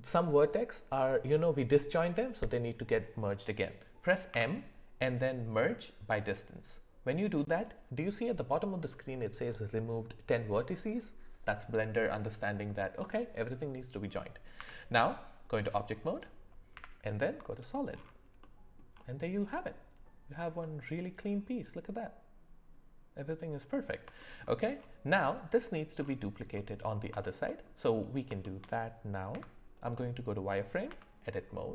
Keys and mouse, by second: 4.3 m, 14.6 Tab, 16.7 z, 18.4-18.7 middle drag, 19.4 click, 20.6-23.9 middle drag, 24.2 shift+middle click, 26.5 middle click, 27.5 alt+middle click, 28.4 shift+middle drag, 29.3 z, 30.8 Tab.